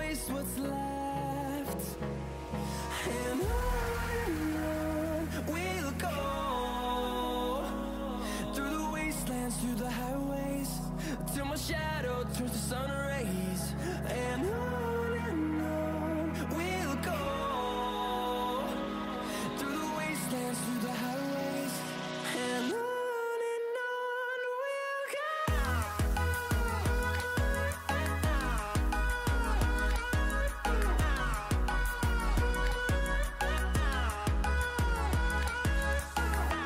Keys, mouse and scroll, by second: 1.2 click, 1.2-8.1 drag, 10.5 scroll down 1, 11.0 scroll up 1, 12.7 click, 13.4 scroll down 1, 16.4-21.4 drag, 21.4 ctrl+right click, 22.2 scroll up 1, 24.0 scroll down 1, 24.1-32.0 drag, 33.4 click.